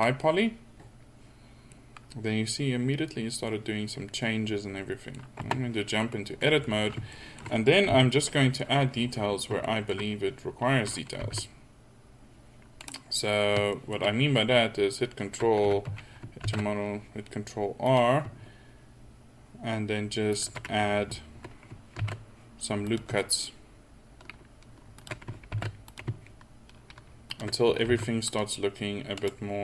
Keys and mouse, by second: 5.5 Tab, 7.4 middle click, 8.0 KP_1, 9.3 middle click, 11.3 ctrl+r, 15.7 a, 15.9 a, 16.5 ctrl+r, 22.1 ctrl+r, 27.9 ctrl+r.